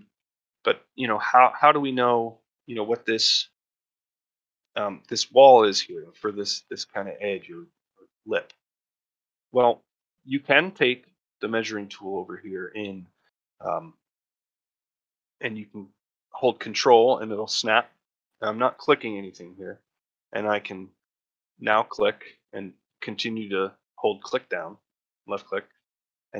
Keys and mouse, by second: 0.0 shift+middle drag, 0.2-1.0 ctrl+middle drag, 1.4 shift+middle click, 1.7 ctrl+middle drag, 4.5-4.9 shift+middle drag, 6.3 middle drag, 8.5-9.0 middle drag, 9.1 shift+middle click, 9.9 shift+middle click, 13.4 click.